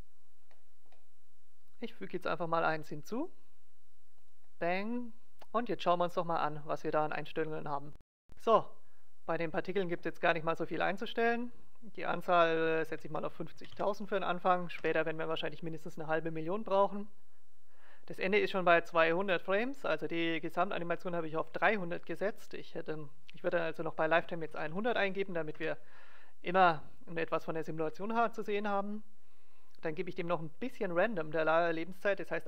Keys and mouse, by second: 0.4-1.6 middle drag, 1.6-3.4 drag, 4.2-6.1 drag, 11.5-13.4 drag, 22.8-24.8 drag, 30.4-32.1 drag.